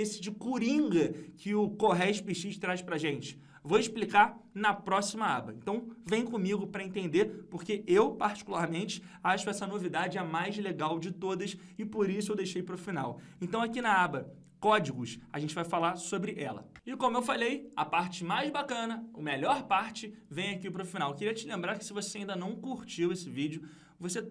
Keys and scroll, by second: 13.6 ctrl+Page_Down.